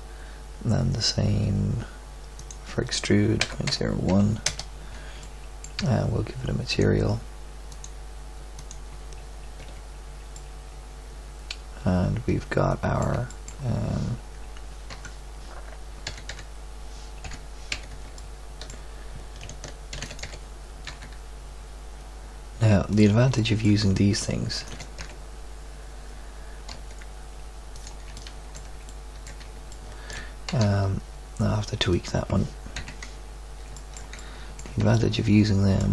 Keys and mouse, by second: 0.3-2.3 middle drag, 4.9 middle drag, 6.6-7.7 middle drag, 9.5 z, 12.6-13.2 middle drag, 14.9 Tab, 16.0 a, 16.3 a, 17.2 KP_7, 17.7 z, 18.3 middle click, 19.9 shift+d, 20.2 g, 24.5 shift+d, 24.9 g, 29.0 middle click, 30.5 g, 32.7 KP_3.